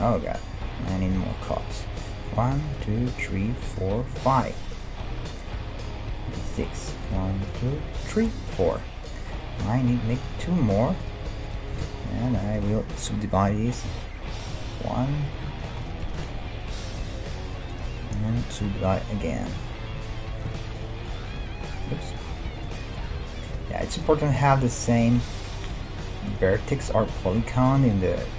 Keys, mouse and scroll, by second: 0.5 g, 2.2-5.9 right drag, 6.4-14.2 right drag, 9.6 g, 10.8 g, 11.8 ctrl+Tab, 13.5 w, 15.5 ctrl+Tab, 16.0-19.5 right drag, 16.2 g, 18.7 w, 20.5 ctrl+Tab, 22.1-28.3 right drag, 22.4 g, 23.2 g, 24.0 g, 25.2 g, 26.5 g, 27.3 g.